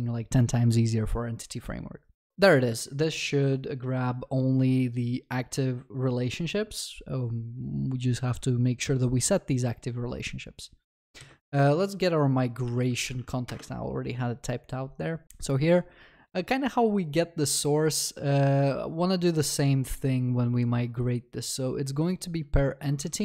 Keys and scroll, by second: 11.2 ctrl+shift+n, 13.5 ctrl+shift+n, 23.0 ctrl+c.